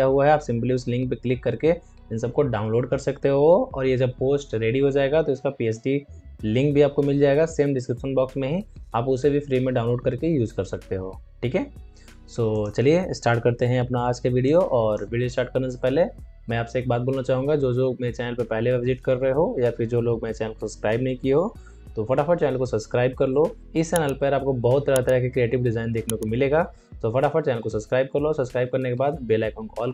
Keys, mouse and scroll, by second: 12.4 click, 13.7 alt+scroll down 1, 14.0 alt+scroll up 1, 14.3 space, 14.4 click, 14.8 space.